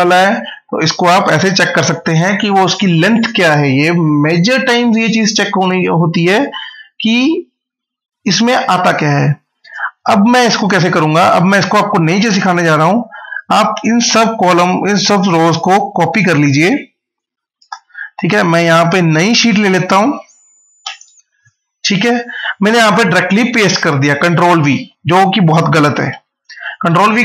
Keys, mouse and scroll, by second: 9.9 scroll up 1, 10.9 click, 12.7 shift+Down, 14.9 Up, 16.8 Down, 17.5 ctrl+c, 19.2 click, 20.7 ctrl+v, 24.2 ctrl+v, 24.4 ctrl+z, 25.7 click.